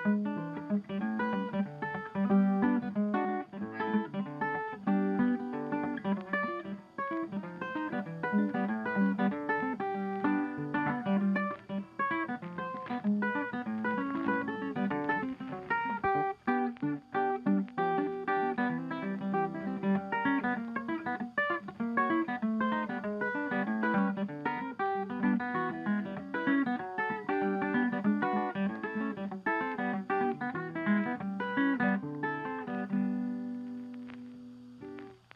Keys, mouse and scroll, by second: 0.3 double click, 1.7 double click, 2.2 double click, 2.8 double click, 4.0 right click, 4.7 right click, 5.7 shift+click, 6.0 Delete, 9.5 double click, 13.4 double click, 14.0 shift+click, 14.8 double click, 15.3 ctrl+click, 15.4 ctrl+click, 15.9 ctrl+scroll down 2, 17.1 Right, 17.2 Right, 17.5 Up, 17.6 Down, 17.8 Left, 18.5 ctrl+z, 20.9 right click, 29.4 right click.